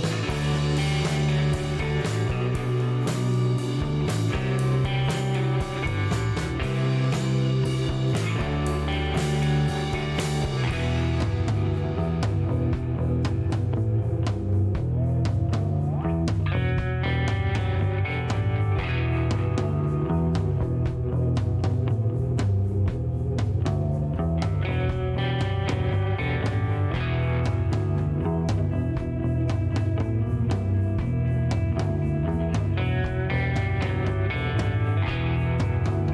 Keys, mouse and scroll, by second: 1.0 click, 3.2 click, 4.3-4.8 scroll up 3, 6.8 click, 10.7 click, 12.0 click, 12.3 right click, 14.4 click, 19.3 click, 21.1 click, 21.6 right click, 22.4 click, 24.6 click, 26.2 KP_3, 26.4 KP_5, 27.7 click, 28.3 middle click, 28.7 shift+right click, 30.2 shift+middle click, 30.6 shift+right click, 32.9 scroll up 2, 33.1-33.6 scroll down 4, 34.2 shift+right click.